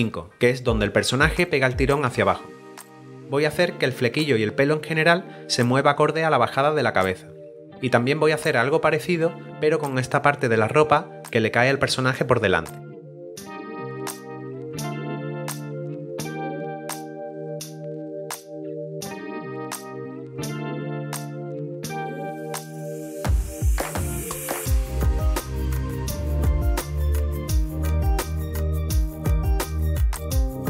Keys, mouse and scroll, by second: 12.1 scroll up 1, 12.8 middle click, 13.7 click, 13.9 right click, 14.2 double right click, 14.4 click, 14.6 right click, 14.7 click, 15.0 click, 15.3 right click, 15.5 click, 16.3 right click, 16.4 click, 16.5 right click, 17.0 right click, 17.2 right click, 17.3 double click, 17.4 click, 17.6 click, 17.9 click, 18.5 b, 18.7 right click, 18.8 click, 18.9 right click, 18.9 double click, 18.9 e, 19.1 click, 19.2 click, 19.3 double click, 20.2 middle click, 20.3 click, 20.5 alt+click, 20.8 Return, 21.2 middle click, 21.5 click, 21.6-22.8 typing, 21.8 scroll up 1, 22.2 click, 22.8 ctrl+d, 23.0 click, 23.2 double click, 23.9 ctrl+z, 24.1 s, 24.2 click, 24.3 click, 24.6 Return, 24.8 right click, 25.0 click, 25.3 right click, 25.5 right click, 25.7 click, 25.8 right click, 25.9 click, 26.2 click, 26.4 right click, 26.7 right click, 27.0 click, 27.2 right click, 27.4 double click, 27.4 right click, 27.6 click, 28.1 right click, 28.2 click, 28.6 right click, 28.9 right click, 29.1 click, 29.4 click, 29.9 click, 30.1 ctrl+d, 30.1 b, 30.2 right click, 30.4 click.